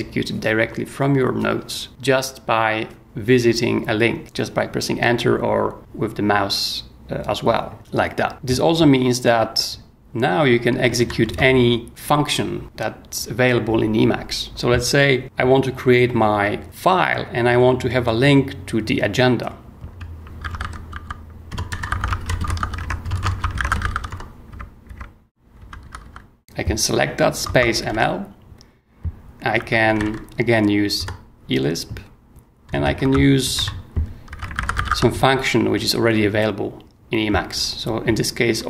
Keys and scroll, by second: 7.8 y, 10.7 k, 11.0 o, 11.3 Return, 20.2-26.3 typing, 27.4-30.5 typing, 31.0 Return, 32.6-35.3 typing.